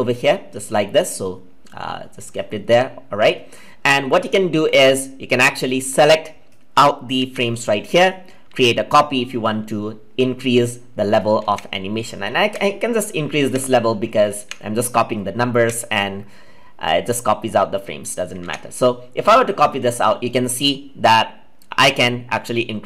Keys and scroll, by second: 7.2 ctrl+c, 11.4 ctrl+c, 12.4 ctrl+v.